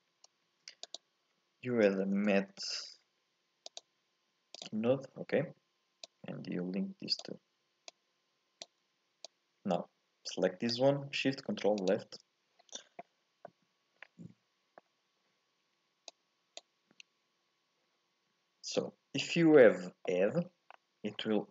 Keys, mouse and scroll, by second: 0.4 shift+a, 4.8-6.0 scroll up 2, 6.0 click, 7.9 click, 11.9 ctrl+shift+click, 13.5-15.0 middle drag, 15.0-16.1 scroll up 1, 16.1 click, 18.7 click, 19.5-19.9 scroll up 2, 20.0 middle click, 20.4-21.1 scroll down 5, 21.1-21.5 scroll up 1.